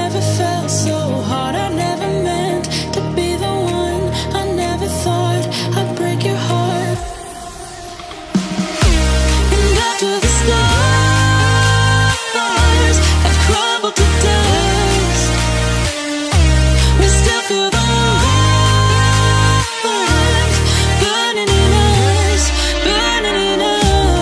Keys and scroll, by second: 0.0-4.7 typing.